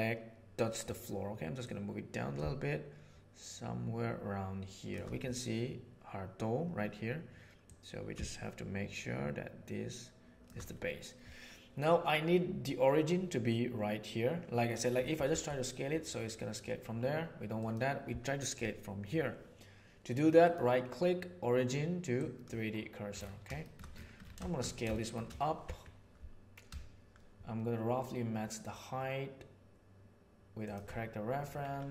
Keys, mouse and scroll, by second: 1.6-3.9 middle drag, 3.9 shift+right click, 7.6-10.4 middle drag, 15.2 s, 23.5 shift+middle drag, 24.9 shift+middle drag, 25.6 s.